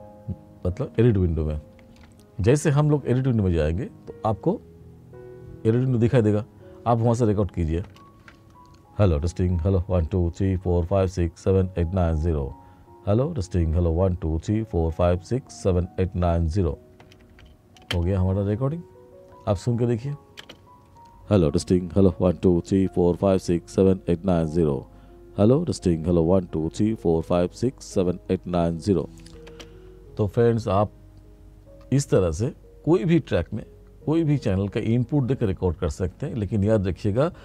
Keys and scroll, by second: 8.2 ctrl+space, 17.3 ctrl+space, 17.9 space, 20.5 space, 29.6 space.